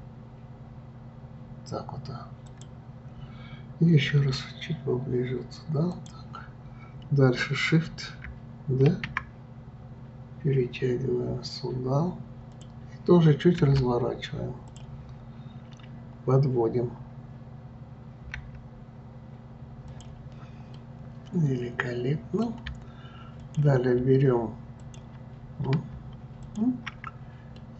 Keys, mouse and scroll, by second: 8.9 shift+d, 20.7-23.4 middle drag, 23.4 click, 24.8 ctrl+click, 25.4-26.4 scroll down 2, 26.4 shift+click, 27.6-27.7 middle drag.